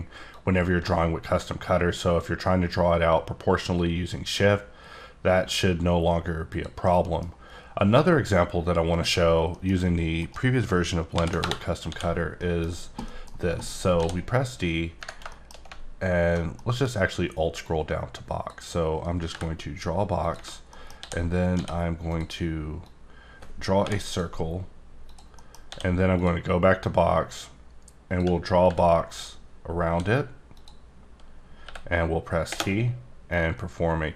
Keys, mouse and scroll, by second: 0.3 click, 6.5 click, 6.8 middle click, 8.9 click, 9.5 middle click, 10.2 right click, 11.1 ctrl+n, 11.8 d, 12.3 middle click, 13.0 middle click, 13.5-13.9 scroll up 3, 13.9 d, 15.3 shift+middle click, 15.7 scroll down 1, 16.6 middle click, 17.6 click, 19.3 b, 20.2 click, 20.7 middle click, 21.5 d, 22.1 click, 22.8 click, 25.1 click, 25.3 scroll down 1, 25.4 middle click, 25.7 d, 26.1 click, 26.8 click, 28.6 b, 29.8 e, 30.6 click, 31.6 t, 33.3 click.